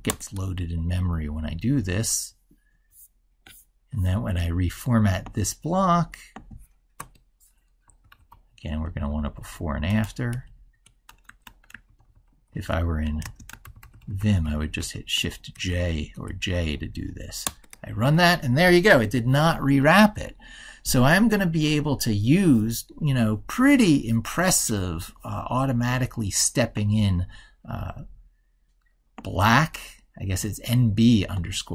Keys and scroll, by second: 9.0 ctrl+Right, 11.8 ctrl+Left, 12.3 ctrl+Right, 13.5 ctrl+Left.